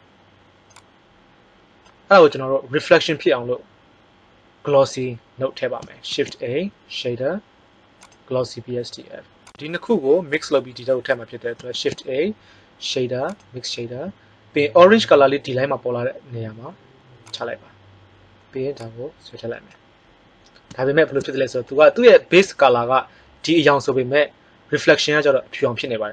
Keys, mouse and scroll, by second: 6.0 shift+a, 11.7 shift+a, 17.3-17.6 drag.